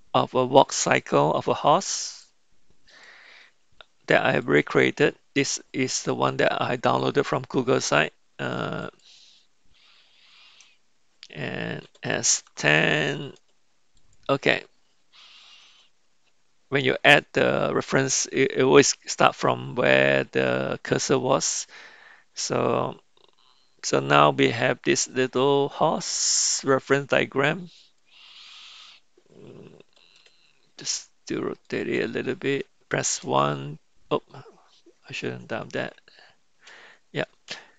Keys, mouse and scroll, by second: 11.8 s, 24.9 s, 28.0 click, 30.4 r, 33.2 KP_1, 36.2 ctrl+z.